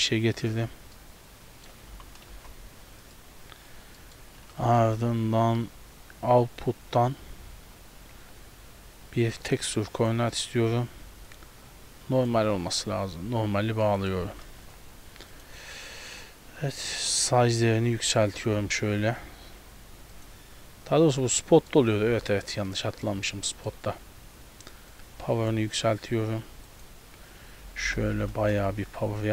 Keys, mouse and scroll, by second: 0.6-0.9 scroll down 2, 1.0 middle click, 2.0 g, 3.8 scroll down 3, 4.0 middle click, 4.7 shift+a, 10.4 middle click, 10.6 scroll up 1, 11.3 click, 13.6-13.9 scroll down 3, 13.9 middle click, 14.3 g, 17.2 click, 20.3 click, 21.5 middle click, 22.7 middle click, 23.2-23.7 scroll down 2, 23.5 middle click, 23.7-24.0 scroll up 3, 25.0 click, 26.7 click, 28.1 KP_0, 28.4 KP_0.